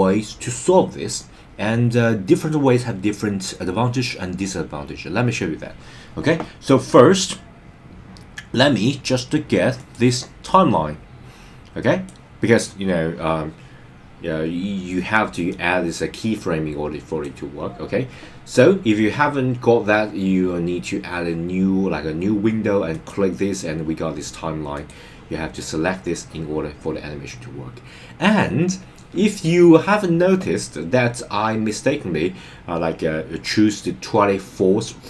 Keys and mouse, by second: 9.9 click, 10.5-12.1 drag, 15.5-17.3 drag, 22.9 click, 24.7-25.9 drag.